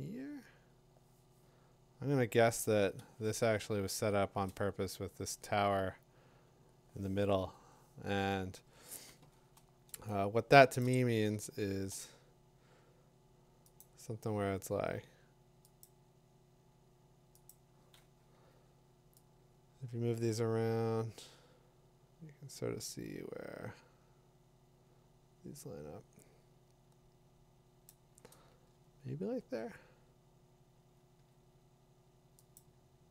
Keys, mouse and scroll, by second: 4.3-9.8 drag, 11.9 click, 11.9 p, 13.8 click, 15.8 click, 17.5 click, 27.9 click, 29.0-30.5 click, 32.5 middle click, 32.6 click.